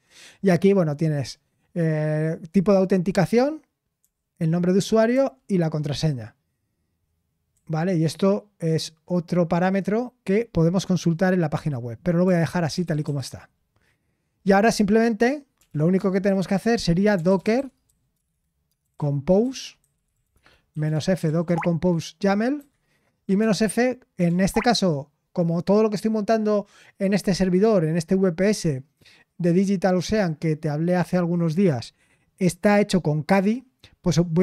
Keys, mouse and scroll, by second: 4.0 typing, 6.7 typing, 8.2 typing, 12.6-13.5 typing, 15.3-24.7 typing, 26.4-27.1 typing.